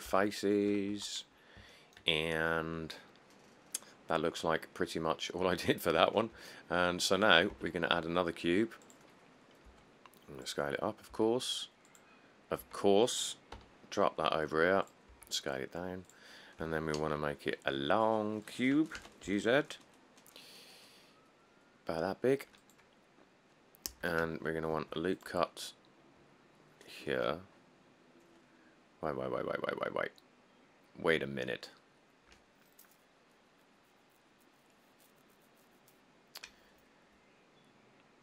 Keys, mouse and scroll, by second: 0.0 click, 0.1 click, 0.3 Tab, 0.7 click, 0.8 click, 1.0 click, 1.1 1, 1.6 click, 1.8 click, 2.4 middle click, 2.4 middle click, 2.5 middle click, 2.7 middle click, 2.9 middle click, 4.4 middle click, 4.7 middle click, 4.8 middle click, 4.9 middle click, 4.9 middle click, 5.3 middle click, 5.5 middle click, 6.2 middle click, 7.7 a, 9.9 s, 11.3 s, 13.3 s, 13.7 g, 15.3 s, 16.8 s, 17.2 z, 19.2 g, 23.5 middle click, 23.6 middle click, 24.1 Tab, 25.0 ctrl+r.